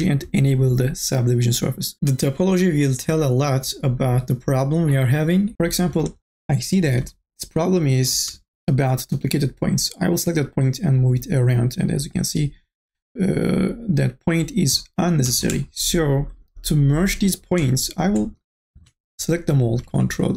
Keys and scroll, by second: 6.8 1, 19.1 ctrl+a.